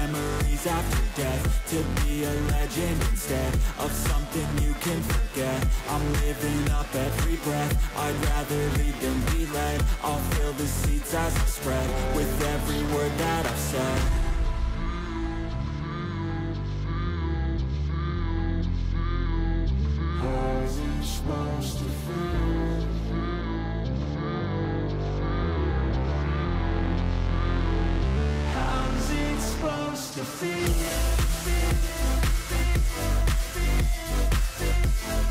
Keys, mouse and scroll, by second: 2.1 ctrl+j, 2.7 shift+click, 5.3 right click, 7.8-8.5 scroll down 1, 8.5 scroll down 2, 9.9 ctrl+j, 11.1 ctrl+t, 12.1 shift+click, 15.4 scroll up 4, 17.5 scroll up 1, 18.8 shift+click, 23.3 ctrl+j, 24.1 shift+click, 29.1 shift+click, 31.5 right click, 35.1-35.3 scroll up 8.